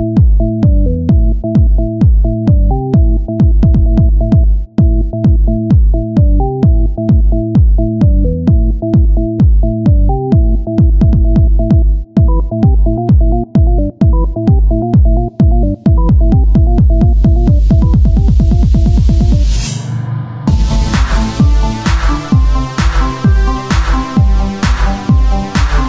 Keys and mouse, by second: 4.0 z, 6.6 Tab, 9.9 Tab, 13.6 Tab, 15.1 Tab, 17.0 ctrl+r, 19.4 ctrl+r, 20.0 ctrl+Tab, 21.7 KP_Divide, 23.8 click, 24.0 right click, 24.1 ctrl+b.